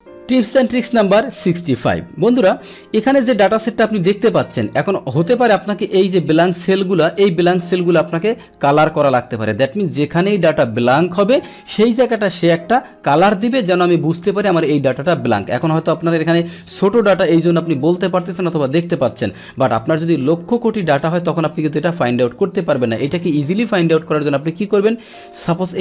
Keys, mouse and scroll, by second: 3.0-4.3 drag, 4.7 click, 5.9 click, 6.4 click, 7.0 click, 8.1-9.7 drag, 14.6 click, 16.0-18.1 drag, 24.1 click, 25.0-25.8 drag.